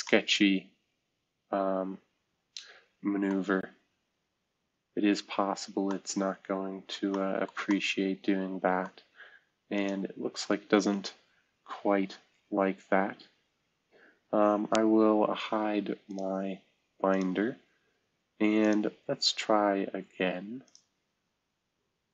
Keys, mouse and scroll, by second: 3.4-3.9 scroll down 1, 3.9-4.6 scroll up 1, 4.6-5.1 scroll down 1, 5.1-5.7 scroll up 1, 9.7 click, 11.8 Delete, 16.0 click, 16.4 space, 18.6 click.